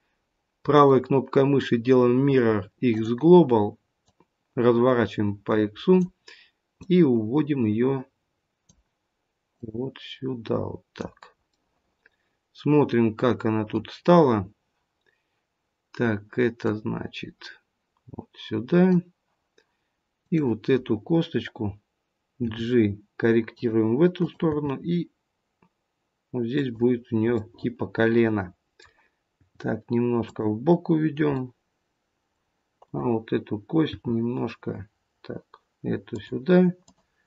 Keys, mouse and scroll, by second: 3.9 click, 6.8 click, 11.5 middle click, 13.9-16.5 scroll up 2, 16.5 click, 20.1 click, 22.3 g, 24.1 click, 24.8 g, 29.4 g, 31.3 middle click, 32.7 click, 33.8 g, 36.8 click.